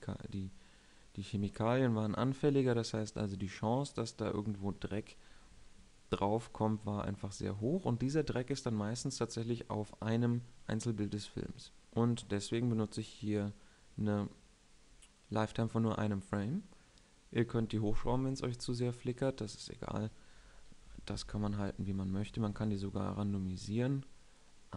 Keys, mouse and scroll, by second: 21.2 shift+Left, 21.6 alt+a, 22.5 alt+a.